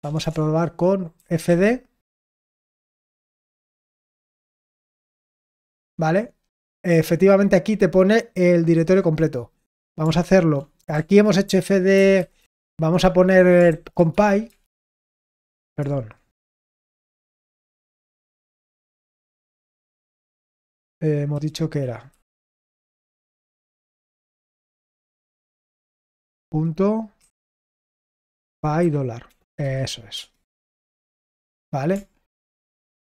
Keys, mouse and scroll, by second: 7.9-10.5 drag.